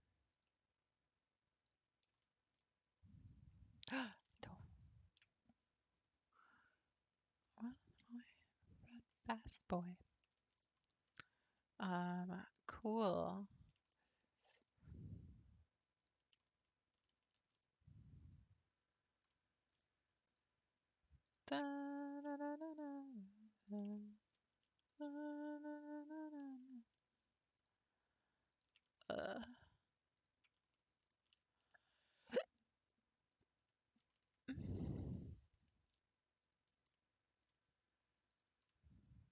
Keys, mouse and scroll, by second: 0.3 ctrl+click, 1.6 ctrl+click, 2.2-3.2 middle drag, 3.2 ctrl+click, 4.2 ctrl+z, 4.8 ctrl+click, 6.4-8.3 drag, 8.3-10.7 middle drag, 10.7-11.1 scroll up 4, 11.1-12.4 middle drag, 12.4 click, 13.5 ctrl+click, 13.9-15.1 middle drag, 15.1 ctrl+click, 16.0 ctrl+click, 16.6-18.2 middle drag, 18.2 ctrl+click, 19.3-20.3 middle drag, 20.3 ctrl+click, 21.2 ctrl+click, 21.8-22.7 shift+middle drag, 22.7 ctrl+click, 23.6 ctrl+click, 24.0-24.9 middle drag, 24.9 ctrl+click, 26.0 ctrl+click, 26.6 middle click, 27.6 ctrl+click, 28.5 ctrl+click, 29.1-30.2 shift+middle drag, 30.2 ctrl+click, 30.7 shift+middle click, 31.1-31.5 scroll down 2, 31.7-33.3 shift+middle drag, 33.3 ctrl+click, 34.2-36.4 shift+middle drag, 36.4 ctrl+click, 36.9-38.3 middle drag, 38.3 ctrl+click, 38.7-39.3 middle drag.